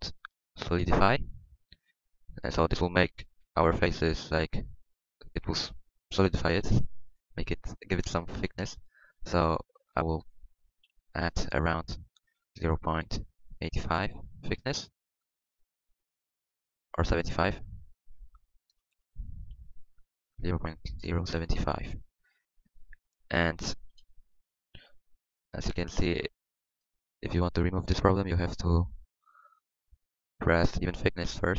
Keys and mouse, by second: 1.9 middle click, 4.2-7.8 middle drag, 9.3-14.9 drag, 18.9 BackSpace.